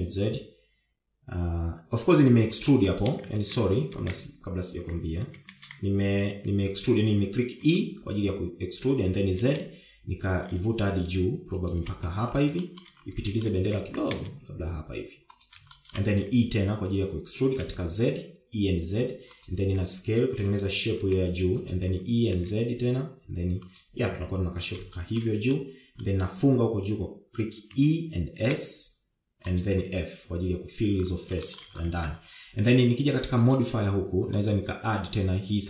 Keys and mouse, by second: 4.4 ctrl+z, 4.9 ctrl+z, 6.4 ctrl+shift+z, 8.7 e, 13.6 shift+middle click, 14.3 shift+middle click, 14.9 g, 16.7 shift+middle click, 17.3 e, 20.6 s, 22.0 s, 22.9 e, 26.0 shift+middle click, 26.5 middle click, 28.7 e, 30.8 f, 32.5 shift+middle click, 32.9 Tab, 34.4 click, 35.5-35.6 drag.